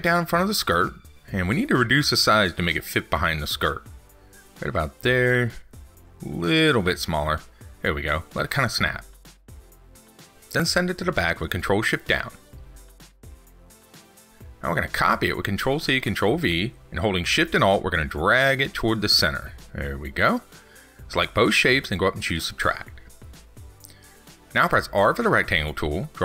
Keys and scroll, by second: 11.4 ctrl+shift+Down, 15.7 ctrl+c, 15.9 ctrl+v.